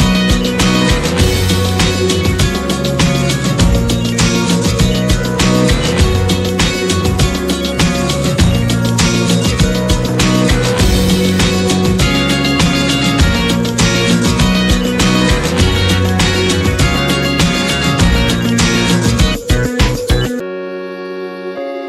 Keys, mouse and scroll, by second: 8.7 click, 10.2-12.8 drag, 12.8 F4.